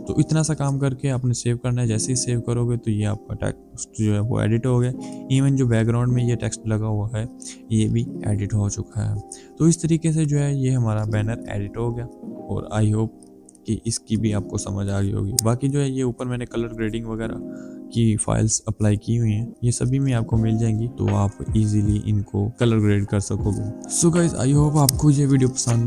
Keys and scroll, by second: 1.4 Return.